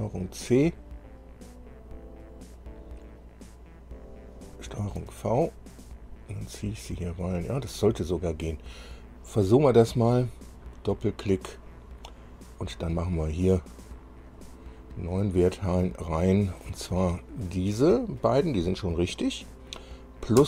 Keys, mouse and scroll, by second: 2.7 click, 4.1 click, 5.0 ctrl+v, 5.5-5.9 ctrl+scroll down 1, 6.5-7.6 drag, 8.1-8.4 scroll down 1, 9.5 click, 10.1 click, 11.8 click, 14.5 click, 16.8 click.